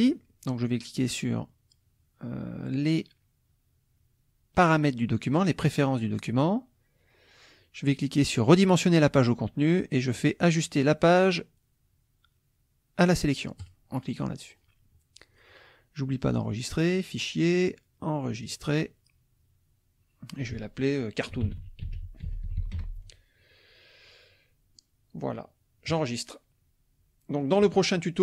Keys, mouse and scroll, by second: 5.7 click, 8.5 click, 13.6 click, 15.3 click, 16.9 click, 18.4 click, 21.1-23.2 typing, 25.9 click, 27.3 middle click, 27.8 click.